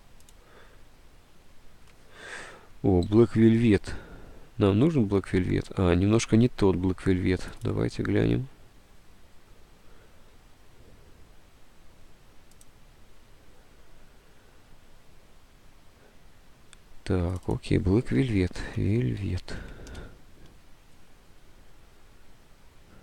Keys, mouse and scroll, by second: 3.2 alt+Tab, 6.2 Tab, 18.3-20.2 typing.